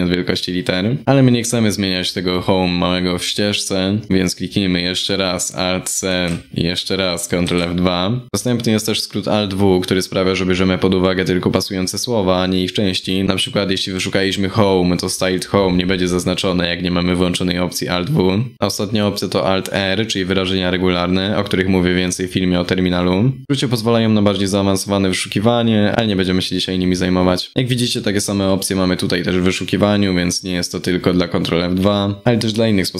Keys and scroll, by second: 5.7 alt+c, 7.0 ctrl+F2.